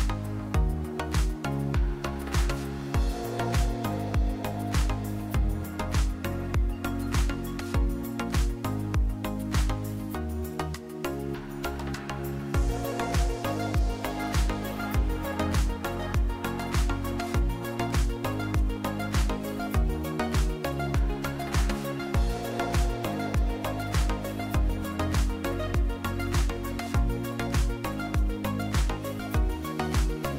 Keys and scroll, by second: 3.4 ctrl+z, 4.9 Tab, 13.2 Tab, 14.0 s, 17.6 ctrl+r, 19.9 1, 21.1 s, 28.3 ctrl+KP_3, 30.2 a.